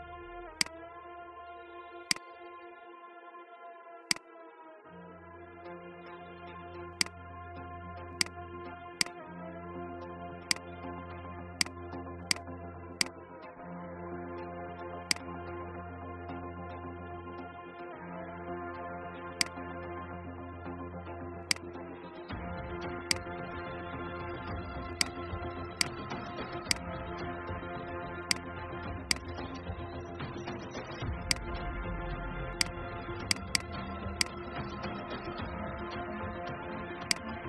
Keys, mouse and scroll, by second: 2.6-3.9 scroll up 1, 3.9 click, 6.1 ctrl+g, 6.9-14.0 drag, 15.0 shift+click, 17.6 Left, 19.3 click, 20.4 alt+scroll up 1, 21.3 click, 30.2 ctrl+x, 31.1 click, 34.9 ctrl+f, 37.0 click.